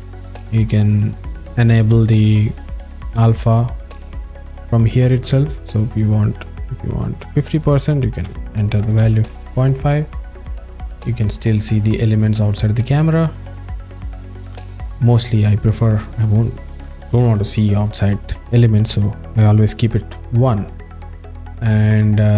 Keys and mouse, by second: 0.2 click, 7.5-9.3 drag, 13.2 click, 21.1 alt+middle click.